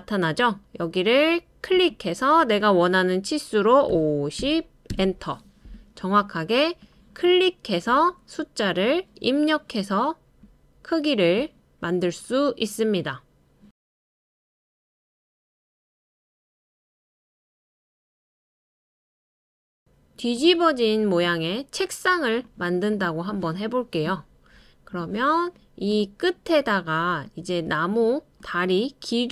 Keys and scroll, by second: 3.9-4.9 typing.